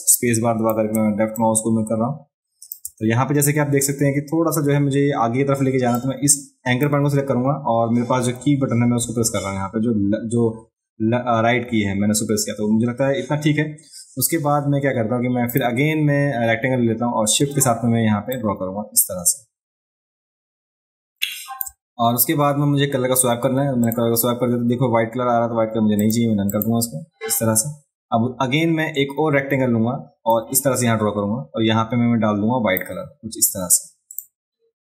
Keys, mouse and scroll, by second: 1.4-2.7 drag, 6.0 click, 15.5 click, 18.4-21.6 shift+drag, 23.8 click, 26.0 click, 26.5 click, 30.3-32.8 drag, 34.1 click.